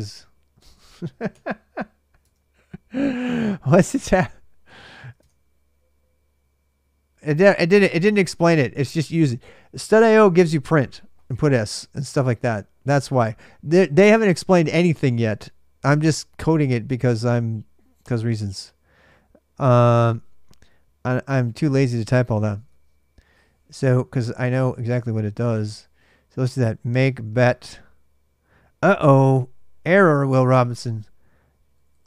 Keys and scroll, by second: 0.3-1.1 typing, 2.0 Tab, 3.0 ctrl+a, 3.1 ctrl+a, 4.9 super+Tab, 22.3 super+Tab, 24.3 ctrl+[, 24.7-27.6 typing, 24.7 Return, 30.4 ctrl+a, 30.7 ctrl+a.